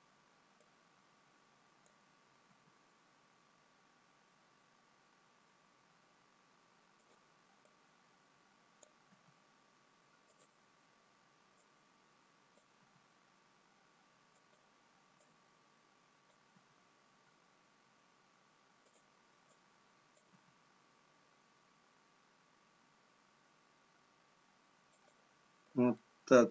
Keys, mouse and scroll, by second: 1.8 click, 3.3 g, 7.8 click, 10.2 g, 11.6 click, 16.9 g, 19.9 click, 21.3 g, 26.0 middle click.